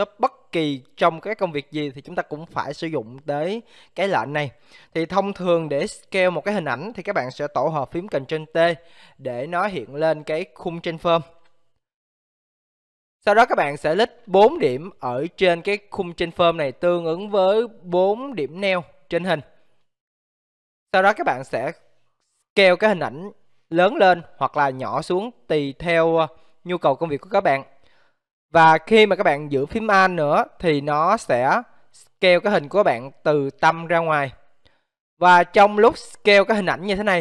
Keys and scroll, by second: 8.3 ctrl+t.